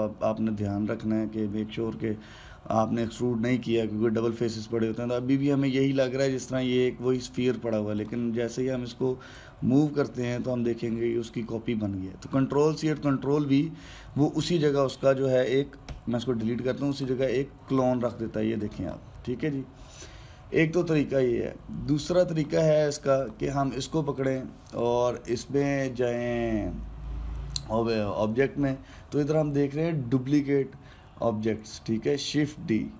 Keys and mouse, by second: 8.7 click, 10.0 click, 16.6 Delete, 17.6 click, 18.6-19.4 drag, 23.0 click, 23.9 drag, 24.9-28.0 drag.